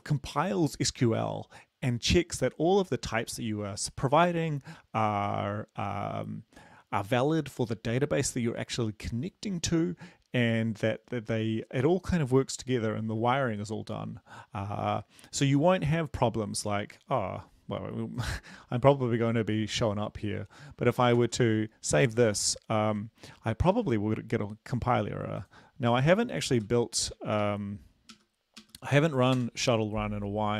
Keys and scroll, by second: 19.0 BackSpace, 21.2 ctrl+s, 23.8 ctrl+`, 26.2-29.0 typing, 29.4 Return.